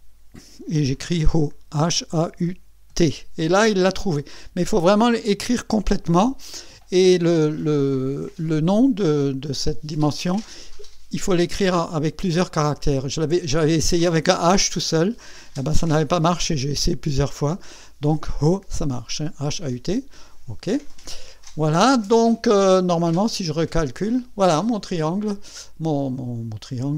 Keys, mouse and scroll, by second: 1.3-2.9 typing, 20.2 click, 23.8 click, 25.0-26.6 drag, 26.8 click.